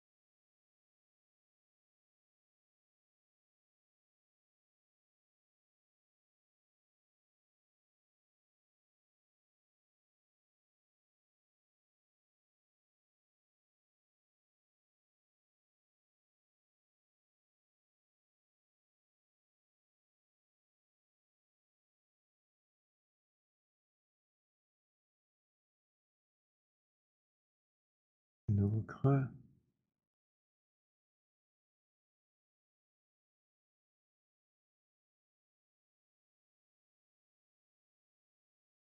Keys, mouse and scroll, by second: 1.6 click, 4.2 click, 6.6 click, 9.0 click, 11.3 click, 13.4 click, 15.8 click, 19.0 click, 21.5 alt+click, 21.8 w, 22.3 click, 26.7 click, 27.5 click, 32.6 alt+click, 33.0 click.